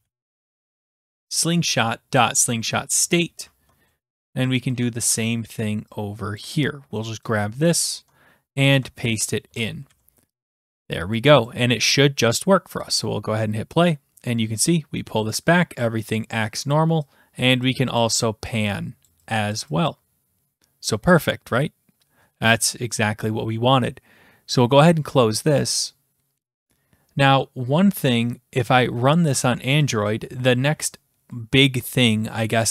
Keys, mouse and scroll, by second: 0.0-1.5 typing, 3.0 click, 3.5 click, 4.6 shift+click, 5.1 ctrl+c, 6.4 click, 8.5 click, 8.7 ctrl+v, 9.5 BackSpace, 9.9 ctrl+s, 11.5 click, 12.8 click, 16.7 click, 17.4 click, 18.0 click, 18.5 click, 19.1 click, 19.5 click, 19.9 click, 24.6 click, 29.9 click.